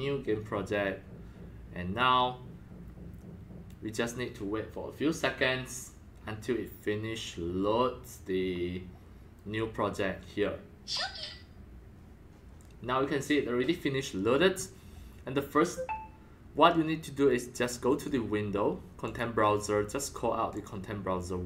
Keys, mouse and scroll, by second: 17.9 click, 18.1 click, 19.0-20.3 drag, 20.5 click.